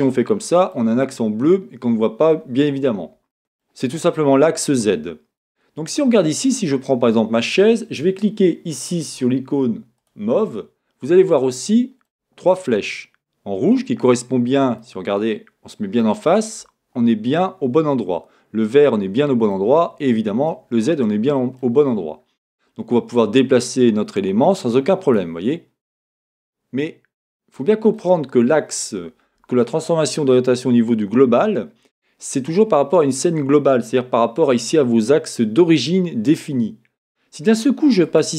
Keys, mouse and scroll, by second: 5.5-6.4 scroll up 2, 6.4 click, 10.1-11.2 drag, 11.2-23.2 middle drag, 16.3-19.5 scroll down 2, 21.9-23.2 scroll up 2, 23.2-28.0 drag, 28.0-35.4 middle drag, 38.0-38.3 drag.